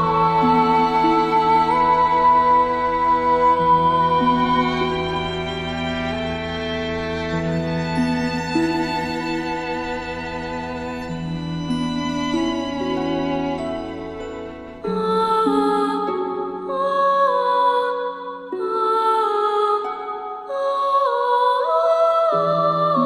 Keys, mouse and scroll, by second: 3.6-4.2 shift+drag, 8.0 alt+scroll up 1, 9.0-10.5 alt+drag, 11.0 alt+scroll down 1, 11.4 space, 11.5-12.0 click, 12.3 space, 12.4-13.4 click, 12.7 space, 14.1-14.6 drag, 16.7 space, 16.7-17.8 drag, 18.8 space, 18.9-22.4 drag.